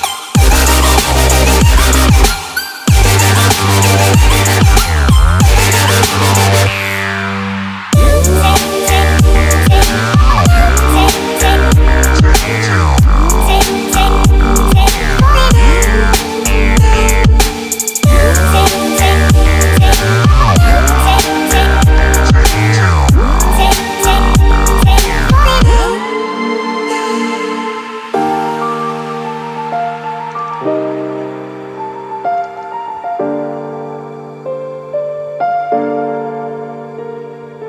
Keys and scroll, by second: 6.6 Escape, 11.9 Escape.